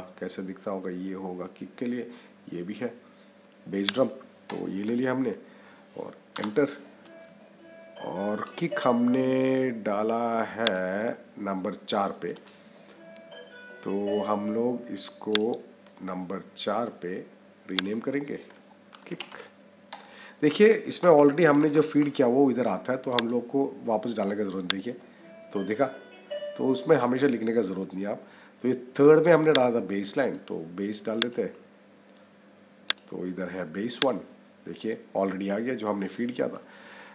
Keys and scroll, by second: 6.2 Return, 18.8 k, 20.9 BackSpace.